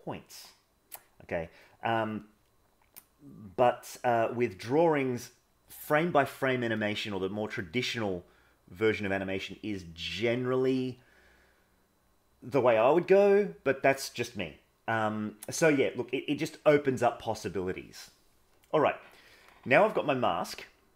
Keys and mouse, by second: 8.1 click.